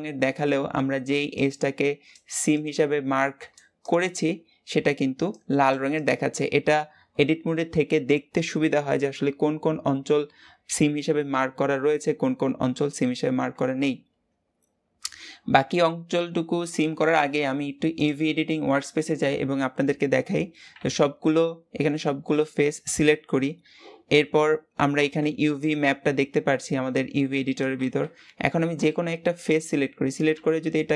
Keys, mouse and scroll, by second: 13.7-16.1 scroll down 1, 17.8 click, 20.2-20.6 scroll up 2, 20.6 a, 29.3 Left, 30.1 g.